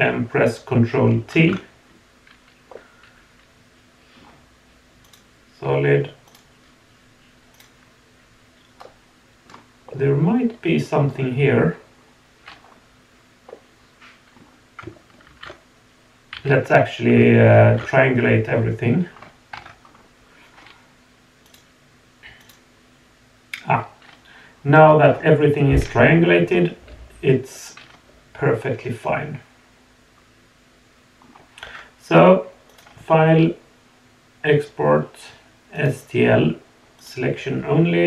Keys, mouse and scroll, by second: 1.3 ctrl+t, 2.7-4.2 middle drag, 5.0 click, 6.2 click, 7.5 click, 8.8 middle click, 9.4 middle click, 9.9-11.1 middle drag, 11.4-12.6 scroll up 4, 12.6 scroll down 1, 13.5 middle click, 15.3 ctrl+t, 16.3 a, 17.7 ctrl+t, 18.5 scroll down 1, 19.1 scroll up 2, 19.5 Tab, 19.8-20.4 scroll down 3, 21.4 click, 22.4 click, 25.0 scroll down 1, 26.0-28.1 middle drag, 26.0 scroll down 1, 28.2-29.2 middle drag, 29.2 click, 31.2 click, 32.7-35.9 drag.